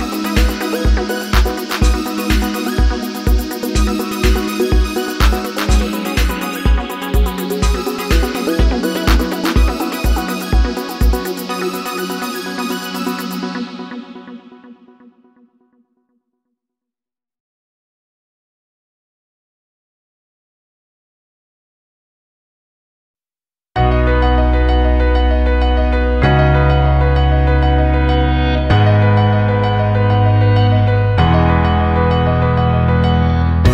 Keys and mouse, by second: 1.5 click, 2.3 g, 5.5 click, 6.3 g, 9.9 click, 11.0 shift+click, 11.7-14.5 right drag, 14.5-16.3 drag, 16.6 g, 18.3 click, 18.7 g, 20.2 click, 20.6 g, 22.6 click, 23.5 shift+click, 24.2-26.5 right drag, 26.5-28.4 drag, 29.2 g, 30.7 click, 31.2 g, 32.5 click, 32.9 g.